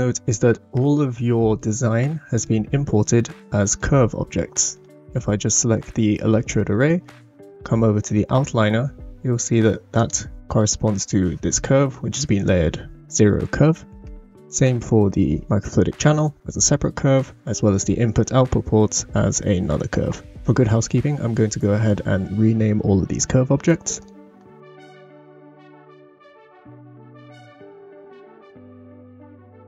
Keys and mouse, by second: 0.8-1.6 middle drag, 2.3 click, 5.3-5.7 shift+middle drag, 9.9 click, 24.0-25.8 drag, 26.4 click, 26.6-28.2 shift+middle drag, 27.6 n, 28.9 shift+middle click, 29.3 shift+middle click.